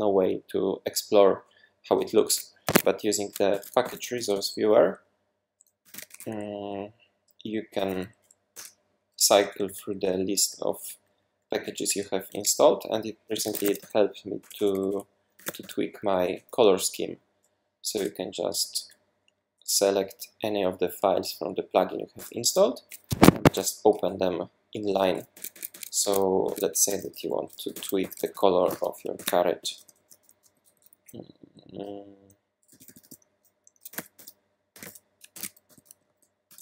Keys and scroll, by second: 2.7 Escape, 3.5 shift+super+p, 3.6-6.6 typing, 7.8 Down, 8.5 Return, 9.2 Down, 9.4 Down, 9.6 Down, 9.7 Down, 9.9 Down, 10.1 Down, 10.2 Down, 10.4 Down, 10.6 Down, 10.7 Down, 11.0 Down, 11.1 Down, 11.3 Down, 11.5 Down, 11.8 Down, 13.1-16.1 typing, 16.3 Page_Down, 17.9 Return, 18.6 Down, 18.8 Down, 22.2 Return, 23.1 Escape, 23.6-31.4 typing, 32.7-36.6 typing, 35.3 super+s.